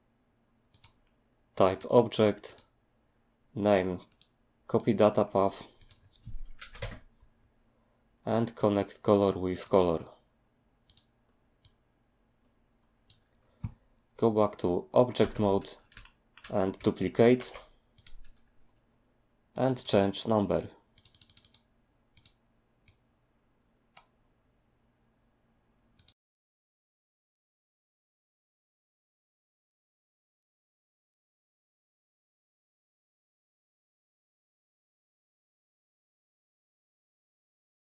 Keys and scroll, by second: 6.6 ctrl+v, 6.8 Return, 15.2 Tab, 17.4 alt+d.